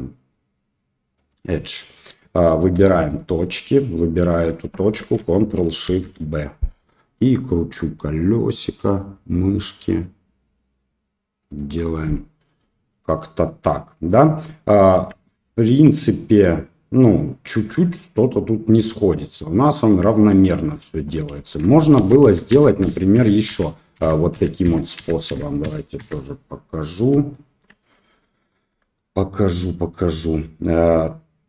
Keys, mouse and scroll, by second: 2.7 1, 3.6 click, 6.0 ctrl+shift+b, 21.6 ctrl+z, 21.9 ctrl+z, 22.2 ctrl+z, 22.5 ctrl+z, 22.8 ctrl+z, 23.1 ctrl+z, 23.5 ctrl+z, 23.9 ctrl+z, 24.3 ctrl+z, 24.6 ctrl+z, 24.9 ctrl+z, 25.2 ctrl+z, 25.6 ctrl+z, 25.9 ctrl+z, 27.3 shift+click, 28.9 shift+click.